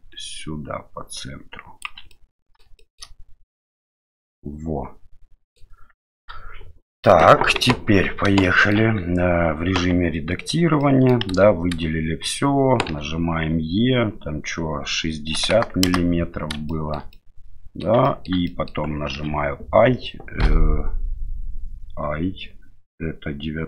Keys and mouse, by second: 2.2-2.6 middle drag, 2.8 shift+middle drag, 3.8-5.6 middle drag, 6.2 shift+middle click, 6.9-7.2 middle drag, 7.7 Tab, 8.4 middle click, 10.8 middle click, 11.3 a, 11.7 a, 12.9 e, 16.7 shift+middle click, 17.1 middle click, 18.1 shift+middle click, 18.6 middle click.